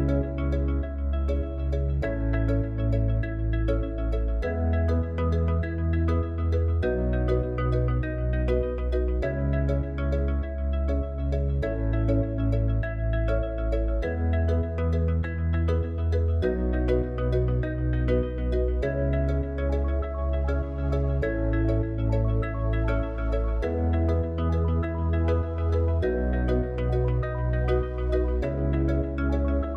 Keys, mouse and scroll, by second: 11.7 click, 14.2 click, 16.5-17.7 drag, 18.9 click, 23.4-25.5 drag.